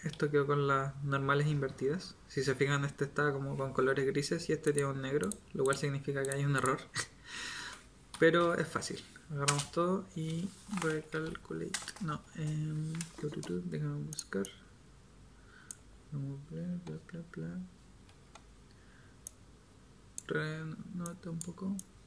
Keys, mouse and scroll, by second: 8.1 a, 9.4 space, 11.9 BackSpace, 18.1 Tab, 21.1 click.